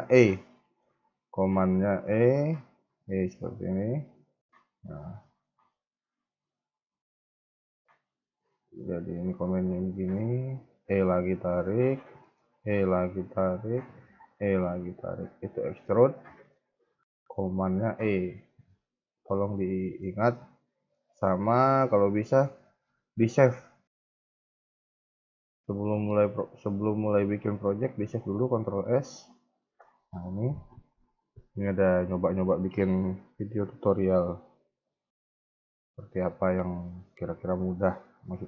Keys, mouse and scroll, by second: 0.1 scroll down 2, 0.5 shift+middle click, 0.8-1.5 scroll up 1, 2.4 e, 5.1 shift+middle click, 9.0 scroll down 2, 9.7 scroll down 1, 9.8 shift+middle click, 10.8 e, 11.9 scroll down 3, 12.1 shift+middle click, 12.5 e, 15.7 KP_3, 15.9 KP_1, 16.3 KP_3, 16.5 KP_1, 17.9 ctrl+z, 18.2 ctrl+z, 19.6 shift+middle click, 20.0-20.6 scroll up 4, 20.6 shift+middle click, 21.0-21.4 scroll up 1, 21.5 shift+middle click, 21.9 scroll up 2, 22.2 a, 22.3 a, 27.7 ctrl+s.